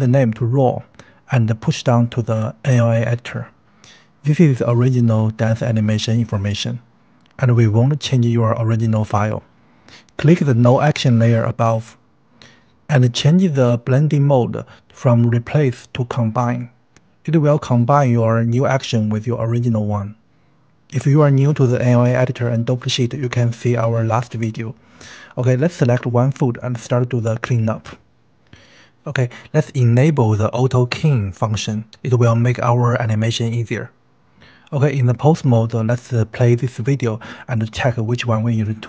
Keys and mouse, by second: 0.0 click, 1.7 click, 3.1 click, 6.3 click, 10.5 click, 15.0-16.4 middle drag, 25.2 click, 27.3 click, 32.1 click, 36.2 shift+middle click, 37.7 space, 38.3 space.